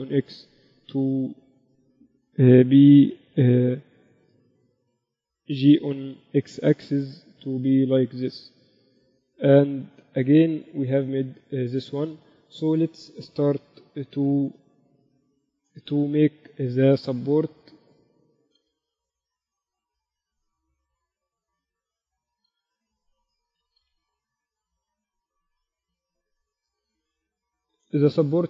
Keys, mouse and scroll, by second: 0.3 e, 3.7 Tab, 4.0 g, 5.4 Tab, 6.6 g, 8.9 Tab, 9.2 z, 11.4 KP_1, 12.9 z, 14.7 KP_Divide, 16.6 z, 17.1 z, 17.6 z, 19.1 s, 21.4 z, 22.9 s, 24.3 s, 27.5 z, 27.8 z.